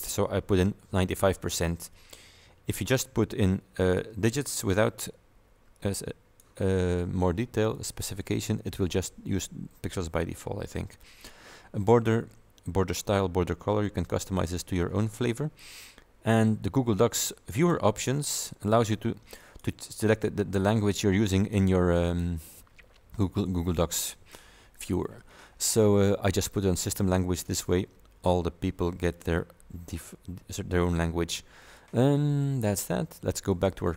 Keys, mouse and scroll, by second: 3.9 click, 5.8 click, 7.8 click, 13.2 scroll down 2, 13.9-14.7 scroll down 4, 15.1-15.7 scroll up 2, 17.6 click, 19.5 click, 21.5 click, 22.2 click, 29.2 click, 33.6 click.